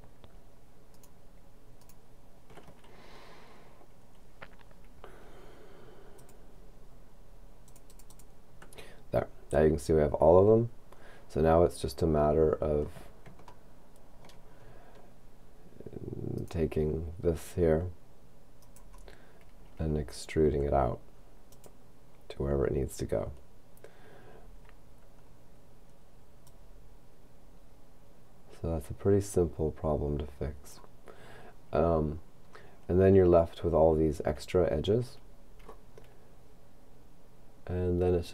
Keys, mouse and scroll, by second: 0.9 right click, 6.2 click, 7.7 click, 13.7 shift+middle click, 14.6-15.8 shift+scroll up 2, 16.4 right click, 18.6 right click, 20.5 e, 21.5 click, 22.6-25.1 scroll down 2, 26.5-31.7 drag, 32.1-33.8 scroll up 2, 33.8 scroll up 1, 34.8-35.9 scroll down 2, 35.9-36.3 scroll down 1.